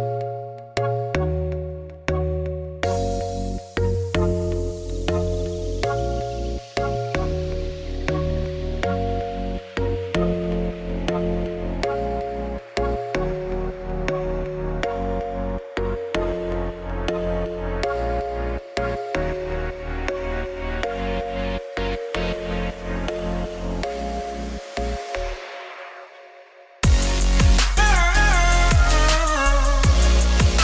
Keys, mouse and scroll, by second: 7.4-10.0 typing, 7.7 middle click, 7.8 Tab, 8.4 middle click, 9.7 middle click, 9.9 Tab, 10.6 middle click, 11.2 Tab, 11.5 KP_3, 11.9 z, 12.7 ctrl+Right, 13.3 ctrl+Right, 14.6 Tab, 14.7 middle click, 14.9 z, 15.8-17.4 middle drag, 17.4 shift+a, 18.0 Tab, 18.1 s, 18.8 s, 19.3 z, 19.7 middle click, 20.4 Tab, 20.5 g, 21.3-22.6 middle drag, 22.6 click, 22.7 Tab, 22.8 3, 23.0 click, 23.6 x, 24.2-25.7 middle drag, 25.7 Tab, 26.0 click, 26.2 shift+middle click, 26.3 Tab, 26.5 ctrl+r, 27.4 3, 27.7 alt+click, 28.5 alt+e, 30.2 ctrl+r.